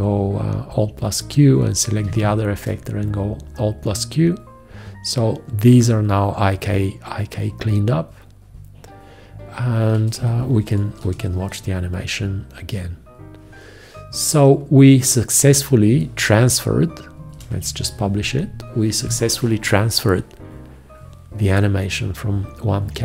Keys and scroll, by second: 2.1 alt+q, 10.2 F1, 11.0 Return, 17.3 ctrl+Return.